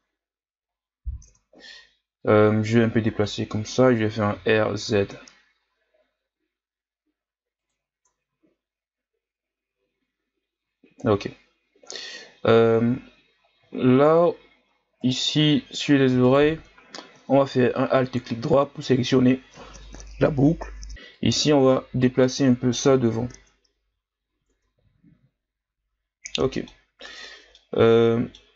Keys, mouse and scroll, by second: 0.1 ctrl+scroll down 2, 0.6-1.3 scroll up 2, 1.3 Tab, 2.2-4.3 drag, 4.3 r, 7.9 Tab, 8.5-9.7 scroll down 4, 9.7-12.4 scroll up 1, 12.4-13.7 scroll up 9, 13.7-14.1 shift+scroll down 2, 14.2-15.0 ctrl+scroll up 4, 15.0 right click, 15.2 Tab, 16.2 alt+right click, 17.9-20.9 scroll down 1, 20.9 middle click, 21.1-22.8 drag, 22.8 KP_1, 24.6 Tab, 26.3 middle click, 26.8 scroll up 1, 27.1 Tab, 27.5-28.5 middle drag.